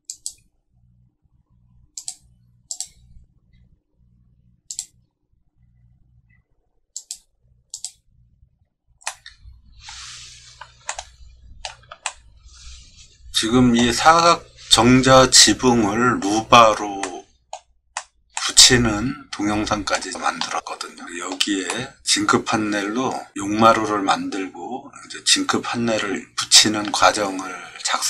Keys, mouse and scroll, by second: 0.1 click, 2.0 click, 2.7 click, 7.0 click, 7.7 click, 9.1 middle click, 10.9 shift+middle click, 12.1-13.8 middle drag, 17.0 middle click, 18.0 middle click, 18.3-19.9 shift+middle drag, 20.1 middle click, 20.6 middle click, 21.0 middle click, 21.7 middle click, 22.1 scroll up 1.